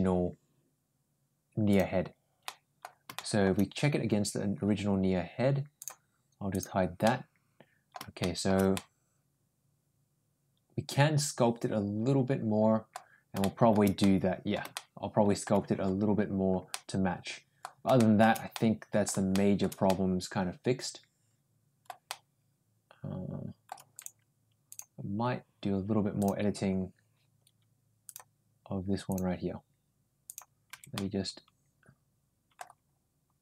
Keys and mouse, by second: 1.5 click, 2.3 middle click, 3.0 shift+middle click, 5.6 click, 6.3 click, 6.8 middle click, 8.0 shift+middle click, 8.5-12.7 middle drag, 13.2-13.5 shift+middle drag, 13.8 middle click, 14.6-15.2 shift+middle drag, 16.5 middle click, 17.8 shift+middle click, 18.3 middle click, 19.1 shift+middle click, 19.7-21.7 middle drag, 21.9-23.5 middle drag, 26.0 click, 27.8 click, 28.9 click, 30.1 click, 30.5 Tab, 30.7-32.4 middle drag.